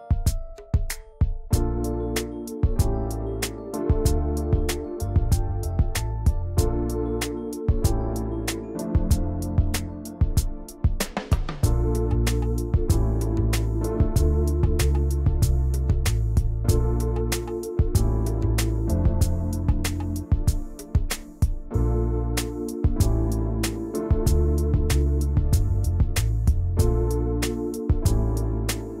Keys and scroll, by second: 7.0 ctrl+c, 7.3 ctrl+shift+v, 9.1 ctrl+z, 14.1 ctrl+z, 20.3 Return, 21.5 ctrl+g.